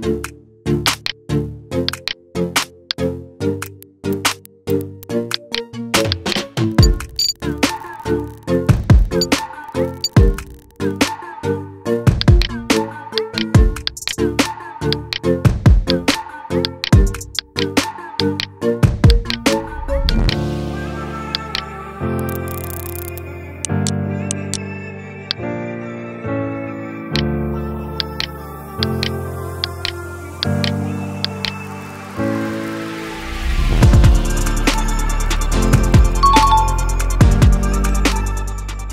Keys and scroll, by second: 8.4 ctrl+z, 8.8 ctrl+z, 9.0 ctrl+z, 32.0 ctrl+t, 34.0 ctrl+t, 34.6 ctrl+t, 35.5 ctrl+t.